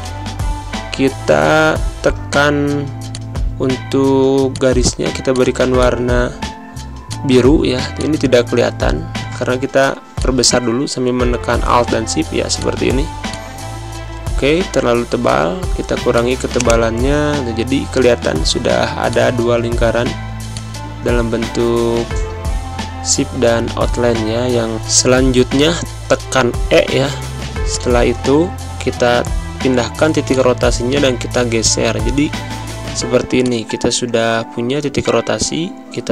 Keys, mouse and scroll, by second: 3.0 click, 4.1 z, 4.4 click, 5.0 space, 5.2 click, 5.4 space, 5.7 click, 6.9 space, 6.9 click, 7.2 space, 7.9 click, 8.7 v, 10.1-12.1 alt+shift+drag, 12.1 z, 12.5 click, 13.0 space, 13.2 click, 13.4 space, 16.0 click, 18.7 z, 19.0 click, 20.1 space, 20.4 click, 20.5 space, 21.7 v, 25.9 e, 27.6-34.8 drag, 34.8 Down.